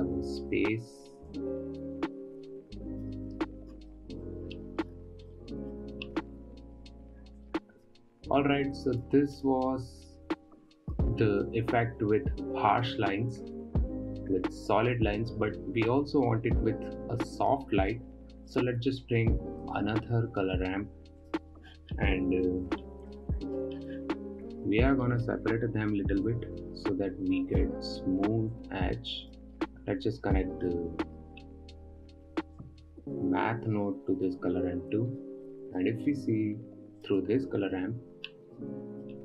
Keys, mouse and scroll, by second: 4.1-4.4 scroll down 4, 4.4 middle click, 4.9-5.7 scroll down 9, 5.7 middle click, 6.5-7.3 scroll up 3, 7.3-7.9 scroll up 1, 7.9-9.9 drag, 11.2-12.0 scroll up 5, 16.4-18.9 middle drag, 18.9 click, 20.0 shift+d, 25.0-25.6 middle drag, 25.6-26.2 scroll up 2, 26.2-26.7 scroll up 2, 26.7-31.3 drag, 31.3-33.0 middle drag, 33.0-35.6 drag, 35.6 scroll down 7, 35.9-37.5 middle drag, 37.5 ctrl+shift+click, 38.8 scroll up 4, 39.0 middle click.